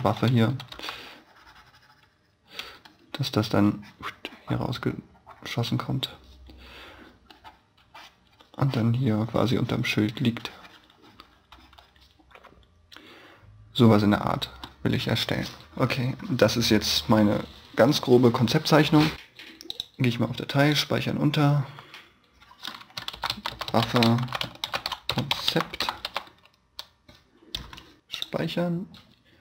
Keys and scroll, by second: 0.2 b, 0.6 e, 2.6 b, 3.4 b.